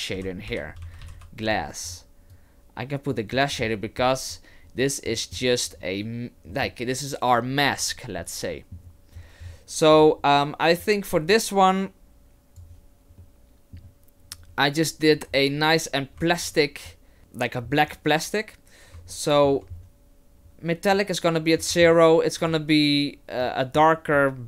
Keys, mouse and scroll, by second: 1.1 s, 2.3 click, 5.1 middle click, 6.5 middle click, 8.2 middle click, 9.4-9.9 scroll up 1, 9.9 click, 9.9 scroll up 3, 17.2 middle click, 19.1 shift+middle click, 19.7-20.5 scroll up 1, 20.5-20.9 scroll up 3, 21.6 middle click, 22.4 click.